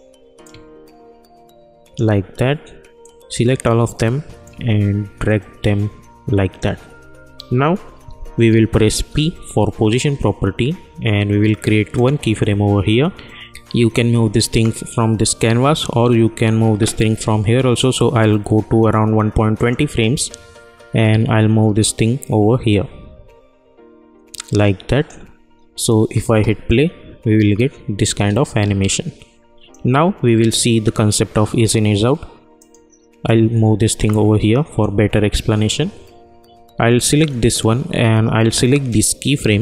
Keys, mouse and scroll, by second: 9.1 p, 11.9 click, 15.0 ctrl+a, 19.5-27.9 drag, 27.9 space, 29.7-32.0 drag, 32.5-37.0 drag, 37.1-39.6 drag.